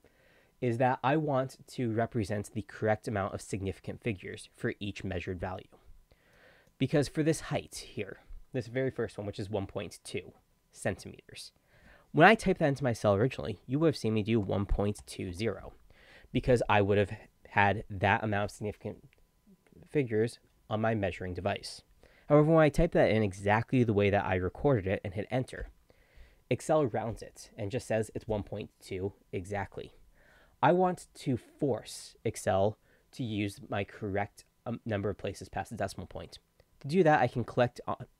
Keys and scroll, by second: 14.3-15.8 typing.